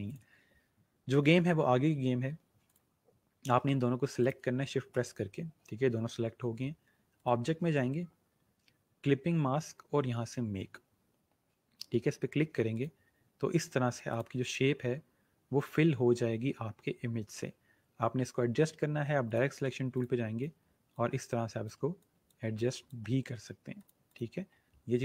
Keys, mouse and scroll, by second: 2.5 click, 7.1 click, 12.7 click, 19.3 click.